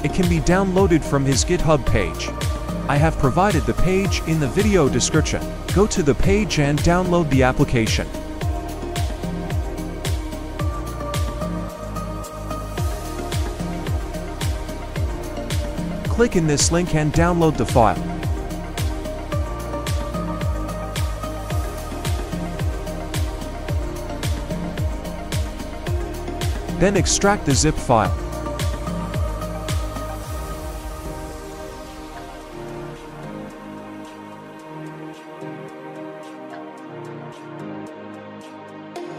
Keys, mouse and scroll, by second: 3.0 double click, 4.1 Home, 4.9 End, 6.0 Page_Up, 7.4 Page_Down, 8.7 F10, 9.3 F10, 10.4 F10, 10.4 F10, 11.6 scroll down 1, 12.3 scroll up 1, 26.1 right click, 30.2 double click.